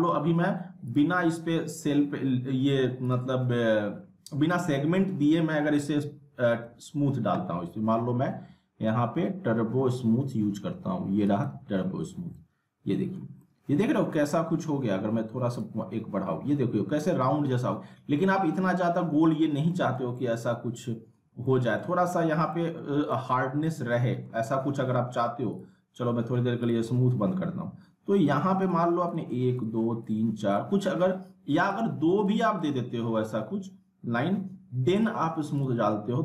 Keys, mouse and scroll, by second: 0.8 click, 3.0 click, 5.2 click, 6.6 typing, 9.9 typing, 11.2 click, 12.3-13.3 alt+middle click, 13.4-14.0 middle drag, 15.5 click, 19.7 middle click, 19.9 scroll down 1, 20.1-21.4 alt+middle drag, 23.1-24.5 alt+middle drag, 25.5 click, 31.7 right click, 32.2 click, 34.9 click.